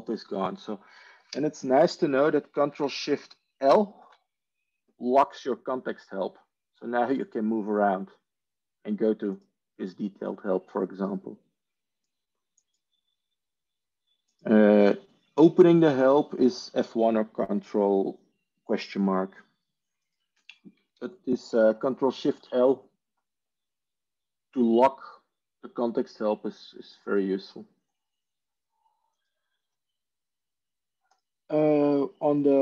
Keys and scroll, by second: 3.6 ctrl+shift+l, 21.0 ctrl+h, 22.1 ctrl+shift+l.